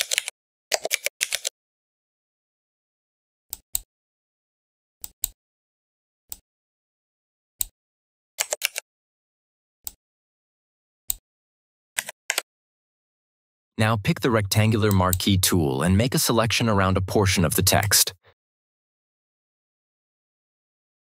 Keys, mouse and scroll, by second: 0.0-1.2 typing, 3.4-7.8 drag, 8.5 ctrl+t, 9.8-11.0 drag, 11.9 BackSpace, 12.2 Return, 14.8 click, 17.7-21.1 drag.